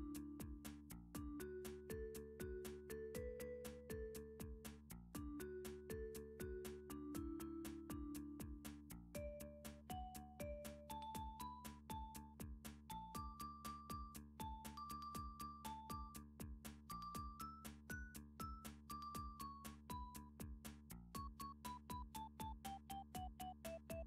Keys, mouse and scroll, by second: 0.0 Tab, 0.0 middle click, 1.0 click, 3.3 click, 4.6 click, 6.0 middle click, 6.5 click, 7.6 x, 8.6 click, 12.5-13.9 drag, 16.6-19.0 middle drag, 19.0-19.4 scroll, 19.1 click, 20.4 click, 20.4 a, 20.9 click, 22.0 click, 22.6 click, 22.8 click.